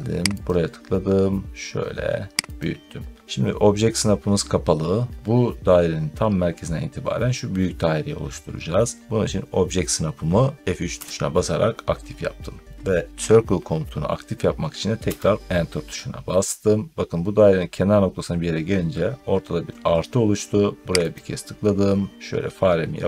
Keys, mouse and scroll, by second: 0.3 click, 2.4 click, 10.8 F3, 15.0 Return, 21.1 click.